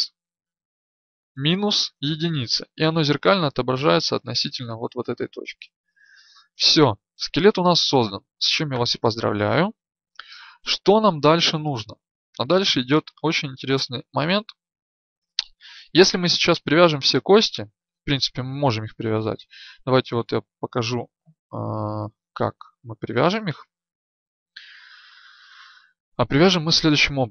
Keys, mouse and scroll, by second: 13.9-27.3 drag.